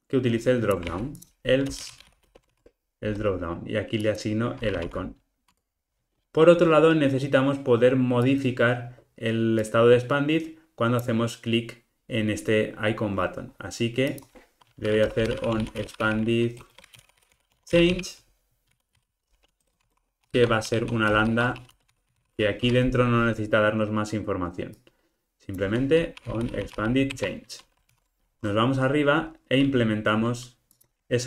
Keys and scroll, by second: 0.8 super+x, 6.2 Tab, 22.6 Escape, 27.1 Return, 27.8 alt+super+l.